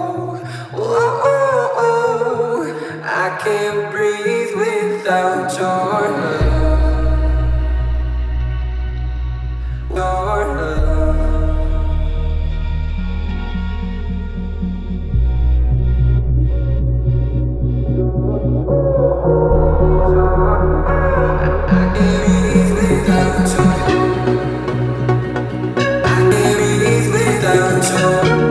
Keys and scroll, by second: 13.4 space, 16.0 ctrl+c, 17.1 ctrl+v, 19.3-20.9 typing, 21.0 Return, 23.6-25.1 typing, 27.3 space.